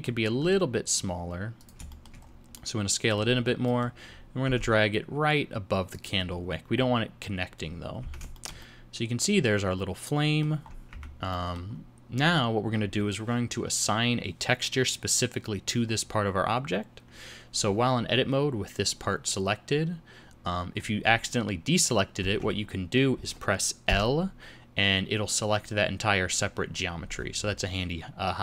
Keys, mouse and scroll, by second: 0.4 s, 1.9 shift+middle click, 2.2 scroll up 3, 2.5 middle click, 3.5 scroll up 1, 3.6 middle click, 4.4 g, 6.5 scroll up 1, 6.8-7.1 scroll down 3, 8.0 Tab, 8.3 shift+middle click, 10.6-11.0 scroll up 2, 10.9 Tab, 11.3 middle click, 19.8-20.2 scroll up 1, 20.3 scroll down 1, 22.3 alt+a, 23.9 l.